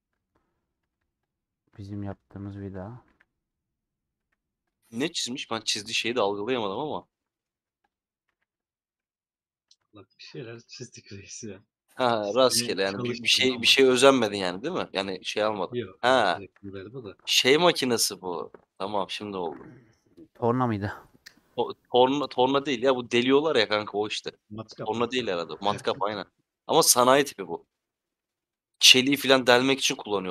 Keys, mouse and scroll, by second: 0.8 Tab, 1.1 click, 1.4 middle click, 1.8-5.6 shift+drag, 5.6 ;, 5.8 middle click, 6.5 3, 7.1 middle click, 7.6 2, 7.7 click, 8.3 a, 10.6 scroll up 1, 10.6 scroll down 2, 11.0-12.2 middle drag, 12.2 /, 29.4-30.3 middle drag.